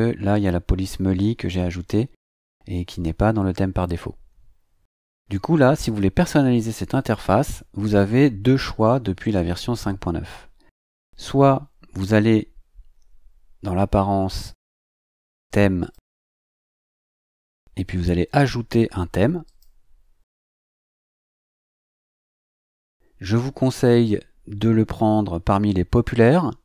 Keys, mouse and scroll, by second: 10.9 click, 15.8 click, 19.4 click.